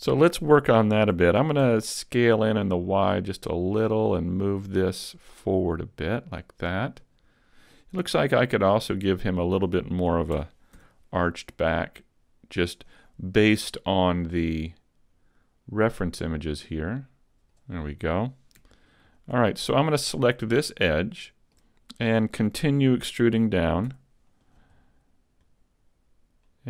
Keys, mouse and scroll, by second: 0.5 scroll up 2, 1.1 s, 1.3 s, 3.8 click, 4.7 click, 8.8 alt+right click, 10.3 s, 12.8 click, 13.7 click, 19.1 alt+right click, 20.8 shift+middle click, 23.9 e, 24.6 click, 25.5 click.